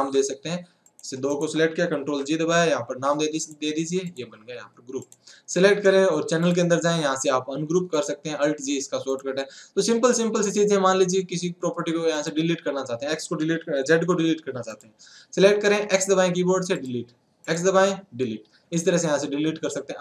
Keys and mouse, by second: 0.0 ctrl+z, 0.8-3.4 drag, 3.4 a, 5.0-9.4 drag, 10.3-14.7 drag, 16.7 x.